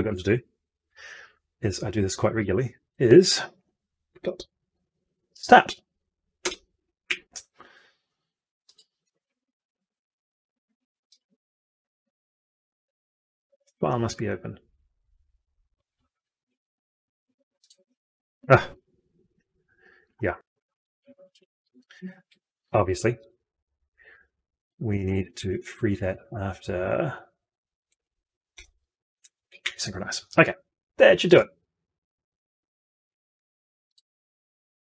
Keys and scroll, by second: 0.6 ctrl+F2, 21.2 ctrl+F2, 26.0 ctrl+x, 28.5 ctrl+v.